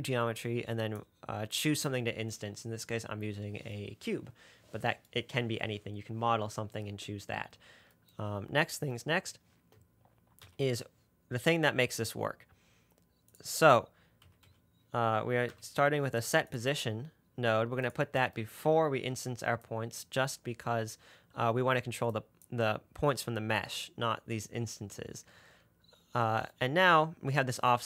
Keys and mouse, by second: 1.3 middle click, 2.2-7.8 middle drag, 10.7 shift+a.